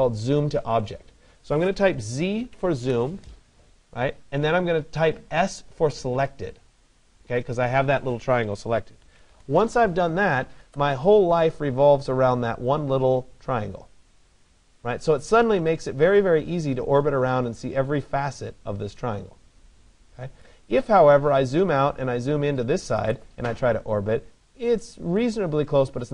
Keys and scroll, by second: 2.5 Return, 8.9 Return.